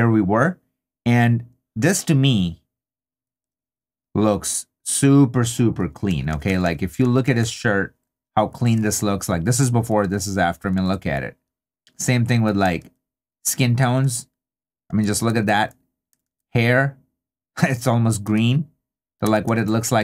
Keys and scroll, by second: 6.1 2, 8.9 super+d, 12.8 super+d, 14.0 super+d, 18.2 super+d.